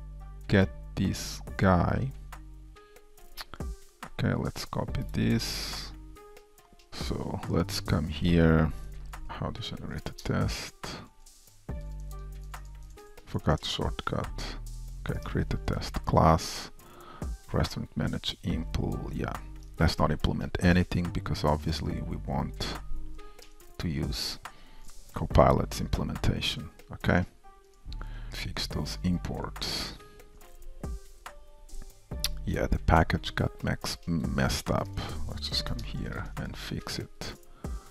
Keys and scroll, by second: 7.8 alt+Down, 10.3 alt+Return, 13.6 alt+Return, 23.4 super+a, 23.5 super+v, 25.5 ctrl+shift+m, 28.3 super+s, 35.6 super+c, 37.5 super+v.